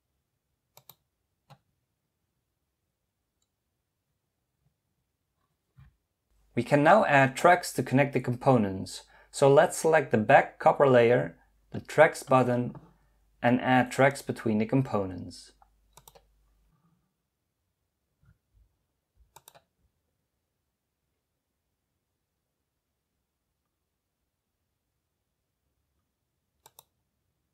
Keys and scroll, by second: 4.9 typing.